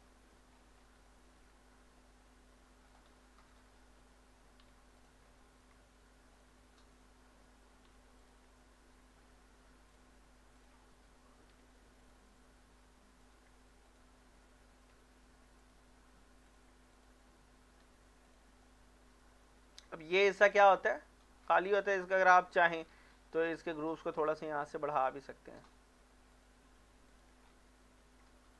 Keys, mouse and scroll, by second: 0.0 middle click, 0.5 scroll down 1, 1.1 shift+middle click, 1.5 scroll up 1, 2.0 middle click, 2.9 click, 3.5 shift+click, 4.6 m, 5.0 click, 5.4 shift+middle click, 6.3 click, 6.9 shift+click, 7.9 m, 8.2 click, 8.6 shift+middle click, 9.1 scroll up 1, 9.9 click, 10.5 shift+click, 11.5 m, 12.0 click, 13.9 shift+click, 14.9 m, 15.6 click, 17.0 shift+click, 17.8 m, 18.3 click, 18.6 middle click, 19.5-21.2 shift+middle drag, 21.2 middle click, 22.1 click, 22.9 Tab, 24.2 click, 24.9 shift+click, 27.5 scroll down 1, 28.0 scroll up 1.